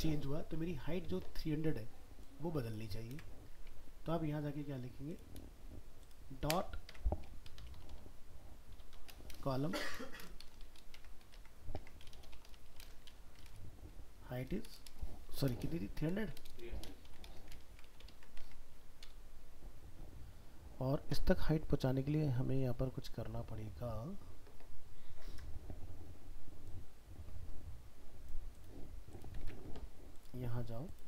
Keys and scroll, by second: 3.1 ctrl+c, 17.7 ctrl+s, 18.4 alt+Tab, 29.4 alt+Tab.